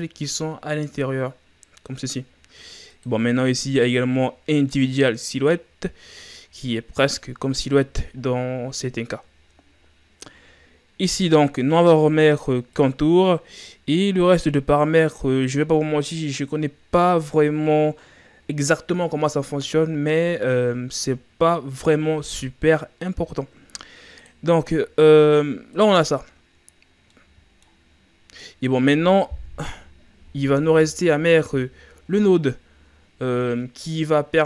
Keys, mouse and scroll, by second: 2.9-5.9 drag, 11.1-14.1 drag, 20.4-20.9 scroll down 3, 21.6 scroll down 3, 23.2-23.7 scroll up 4, 24.2-26.4 drag, 26.4-27.1 scroll down 3, 27.1-27.9 middle drag, 27.9-28.4 scroll down 7, 28.4-29.6 middle drag, 29.6 KP_0, 30.7-31.7 scroll up 4, 31.7-32.7 scroll down 6, 32.7-33.4 scroll up 3.